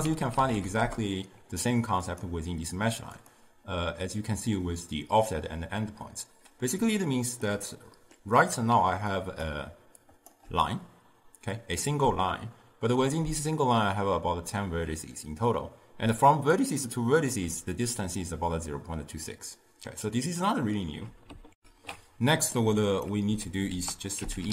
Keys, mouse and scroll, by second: 0.9 ctrl+a, 7.1-9.2 ctrl+middle drag, 9.2-21.6 drag, 21.6 ctrl+alt+shift+q, 23.0 click, 23.4 x, 23.8 ctrl+a.